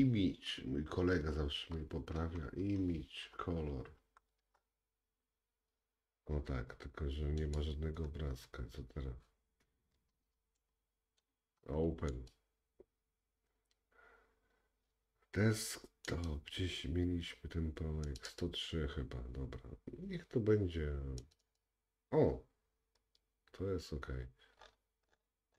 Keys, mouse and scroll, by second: 7.6-12.1 middle drag, 8.3-10.3 scroll down 2, 12.1-13.7 drag.